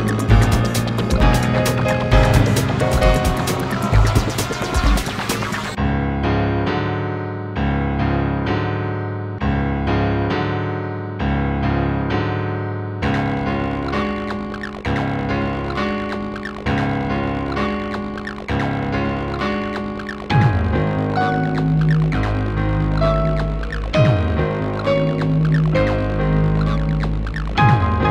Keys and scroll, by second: 3.5 space.